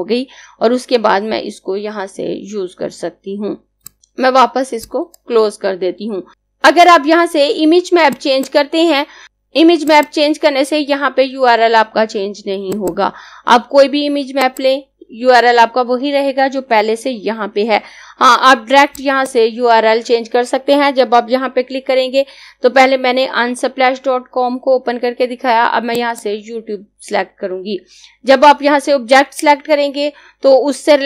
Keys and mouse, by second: 6.3 click, 8.1 click, 12.7 click, 18.8 click, 25.6 click.